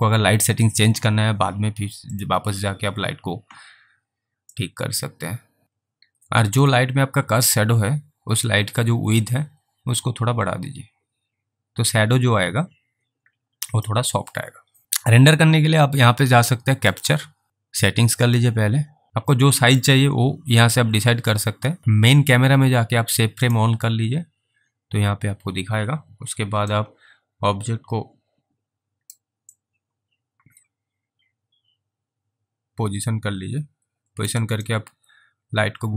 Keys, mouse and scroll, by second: 2.2 click, 4.8 click, 6.6 click, 9.6 click, 17.1 click, 18.2 click, 19.1 click, 23.5 click, 27.1 alt+right click, 29.8 alt+click, 34.9 shift+right click.